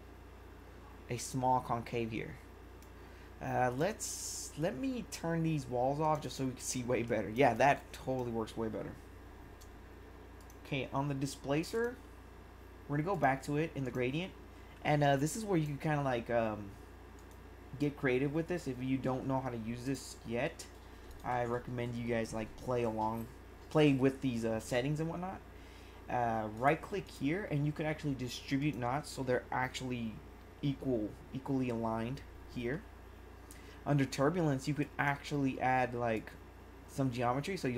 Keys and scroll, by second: 7.0 1.